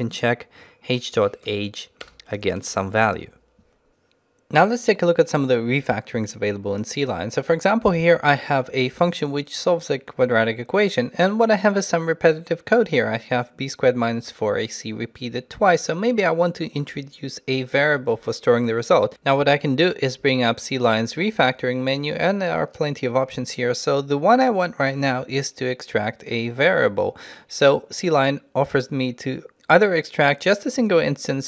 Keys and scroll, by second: 21.0 ctrl+alt+shift+t.